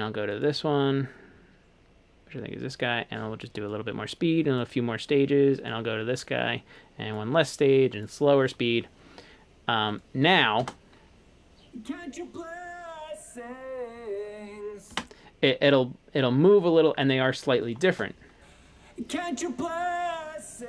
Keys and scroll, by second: 10.7 space, 15.0 space, 18.0 space.